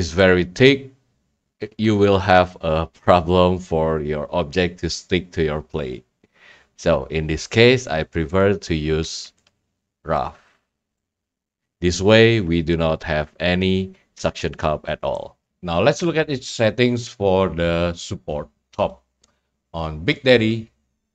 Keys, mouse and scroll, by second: 0.2 right click, 8.4-10.5 drag, 10.5 middle click, 10.5 scroll, 10.6-11.7 drag, 15.1 right click, 20.4-21.1 scroll.